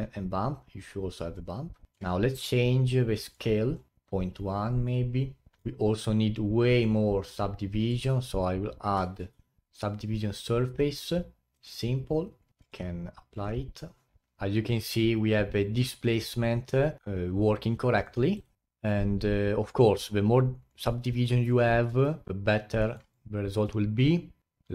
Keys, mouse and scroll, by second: 1.9-2.2 middle drag, 2.2-2.9 scroll up 8, 3.2 click, 5.6 click, 6.7 click, 9.0 ctrl+1, 11.6 click, 12.6-14.6 drag, 18.0 click, 18.3 right click, 18.6 a, 21.6-22.2 alt+drag, 22.2 scroll down 3, 22.3-22.9 alt+drag, 22.9 alt+middle click, 23.1 alt+click.